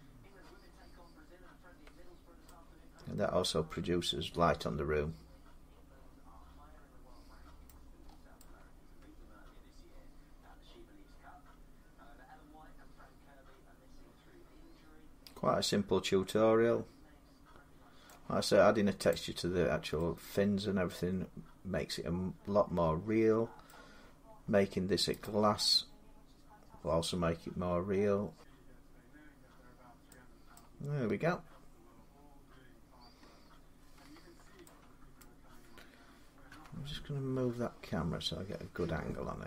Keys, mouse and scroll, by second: 0.5-2.3 scroll, 5.0 middle click, 7.5 middle click, 7.8 scroll down 7, 9.1 scroll up 7, 11.1-12.6 middle drag, 11.1 scroll, 17.9 middle click, 18.9 click, 23.5 middle click, 24.1 scroll, 24.2 scroll up 4, 25.1 click, 26.4 scroll down 3, 28.2 middle click, 28.2-29.9 scroll down 2, 30.4 middle click, 33.1 scroll down 3, 34.7 scroll up 5, 35.0 shift+middle click, 36.3 Escape, 37.6-38.0 scroll down 3, 38.7 scroll up 1, 38.8 scroll.